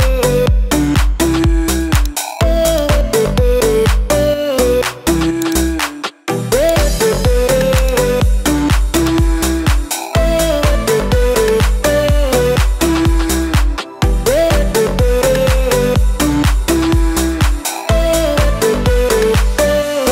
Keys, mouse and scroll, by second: 0.0 click, 1.9 click, 2.7 click, 5.5 click, 6.7 click, 7.8-9.1 drag, 13.4-14.6 drag, 14.8 f, 15.3 click, 16.0 click, 16.6 click, 17.0 click, 17.7 KP_9, 18.0 click, 18.3 click, 18.8 click, 19.4 KP_9, 19.9 click.